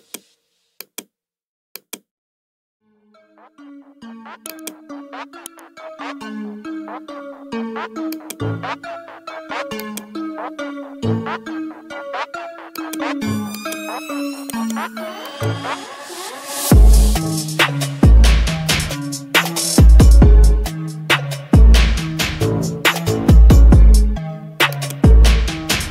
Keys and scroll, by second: 6.2 ctrl+z.